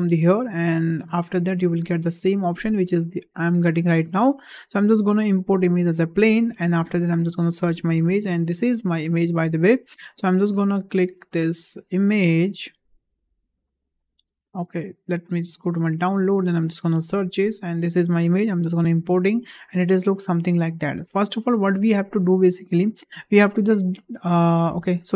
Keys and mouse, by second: 3.5 shift+a, 19.8-20.9 shift+middle drag.